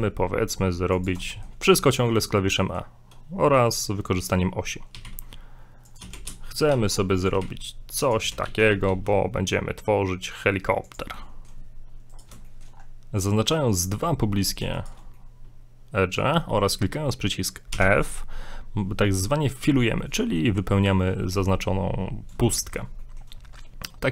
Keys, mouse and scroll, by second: 1.3 shift+middle click, 2.5 middle click, 4.9 e, 6.0 e, 7.4 e, 8.2 e, 11.2 middle click, 12.1 right click, 12.5 shift+middle click, 12.8 scroll up 2, 14.8 shift+right click, 15.2 middle click, 17.7 f, 18.3 scroll down 3, 20.0 middle click, 22.0-22.3 scroll up 3, 22.5 shift+middle click, 23.5 shift+middle click.